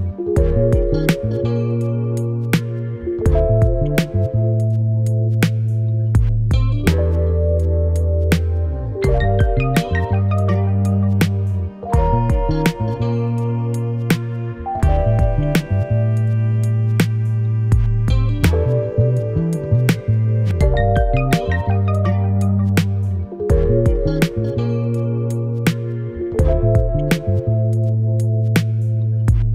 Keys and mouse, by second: 0.4 middle click, 0.6 middle click, 0.8 middle click, 1.0 middle click, 1.4 shift+middle click, 1.6 shift+middle click, 2.0 click, 2.2 click, 2.8 shift+click, 3.4 click, 3.9 click, 5.0 middle click, 6.1 middle click, 6.8 middle click, 7.1 middle click, 7.2 middle click, 7.4 shift+middle click, 7.5 shift+middle click, 8.2 middle click, 8.4 middle click, 8.6 middle click, 8.8 middle click, 9.2 shift+middle click, 9.7 shift+middle click, 10.1 shift+middle click, 10.3 shift+middle click, 10.8 Tab, 11.1 click, 11.3 middle click, 11.6 click, 12.7 middle click, 13.2 click, 13.9 middle click, 14.6 middle click, 15.0 middle click, 15.3 middle click, 15.8 middle click, 16.0 shift+middle click, 16.2 shift+middle click, 16.3 shift+click, 16.3 middle click, 16.5 middle click, 16.6 shift+click, 16.9 middle click, 17.1 middle click, 17.4 middle click, 18.1 middle click, 18.7 shift+middle click, 18.9 shift+middle click, 19.2 shift+middle click, 19.8 middle click, 20.1 middle click, 20.3 click, 20.6 shift+middle click, 20.8 shift+middle click, 20.9 Tab, 23.0 click, 23.7 click, 24.4 click, 24.9 click, 25.6 click, 26.2 click, 26.5 click, 26.8 click, 27.8 middle click, 28.1 middle click, 29.1 middle click.